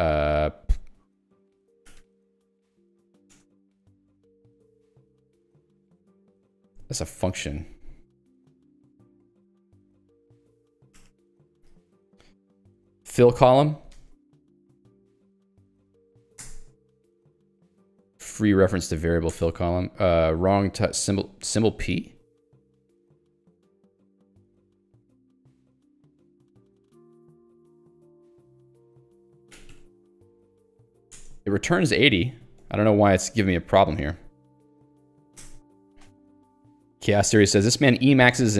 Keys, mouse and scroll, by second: 0.0-3.4 typing, 1.5 Escape, 4.4-5.3 typing, 6.2 ctrl+g, 6.6 Escape, 8.3 ctrl+g, 8.9-16.5 typing, 11.4 Escape, 16.5 alt+Return, 18.5 Escape, 18.8 h, 19.4 alt+Return, 21.4 h, 30.9 ctrl+g, 31.2 alt+Return, 32.6 Escape, 35.4 alt+Return, 35.8 Escape.